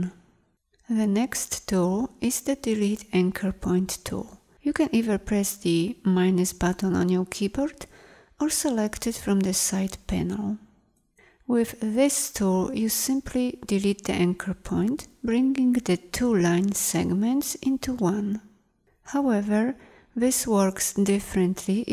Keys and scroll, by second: 5.7 -.